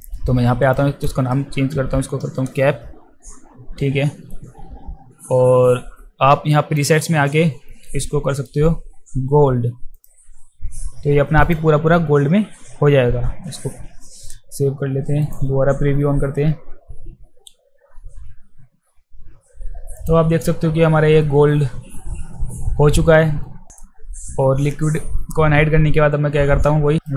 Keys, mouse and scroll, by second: 0.7 click, 1.5-2.4 typing, 6.8 click, 9.9 click, 11.4 click, 13.3 ctrl+s, 15.2 click, 20.0 click, 27.0-27.1 right drag.